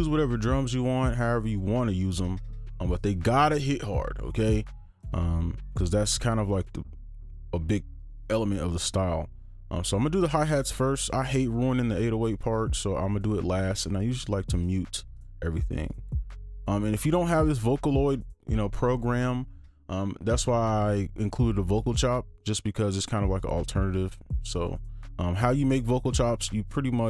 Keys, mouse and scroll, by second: 10.6 right click, 15.4 double click.